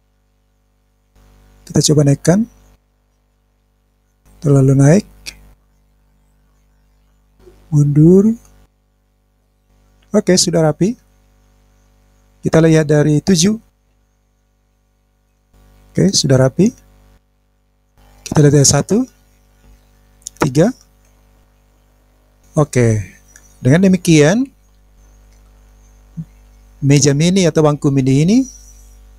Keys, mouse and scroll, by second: 0.0 click, 0.2 click, 0.6 middle click, 1.0 click, 1.9 click, 3.6-4.7 middle drag, 5.5 click, 6.2 click, 6.7 middle click, 7.8 click, 8.3 click, 8.8 middle click, 9.0 click, 9.2 middle click, 9.5 click, 9.7-11.1 middle drag, 11.2-12.0 scroll down 5, 13.8 KP_7, 15.3-16.4 middle drag, 16.6 scroll down 1, 16.7-17.2 scroll down 1, 17.3 click, 17.4 scroll down 3, 17.6 click, 17.8 scroll up 1, 17.9 scroll down 1, 18.9 KP_1, 21.0 KP_3, 21.9 KP_1, 22.1-22.4 scroll down 2, 22.4-25.8 middle drag, 26.4-27.2 scroll up 2, 27.4-28.1 scroll up 2, 28.1-28.8 scroll down 2, 28.8-29.1 middle drag.